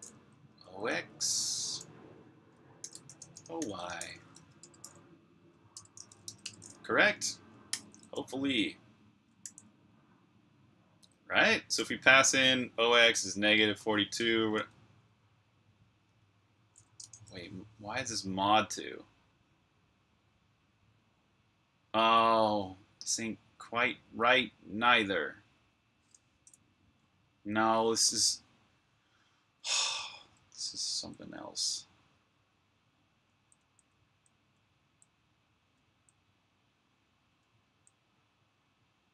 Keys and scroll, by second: 0.0-9.1 typing, 5.6 Return, 7.6 super+b, 9.3 super+j, 13.9-14.4 typing, 15.9-16.9 typing, 26.7 Escape, 30.5 typing, 33.2-35.9 typing, 37.0-38.0 typing.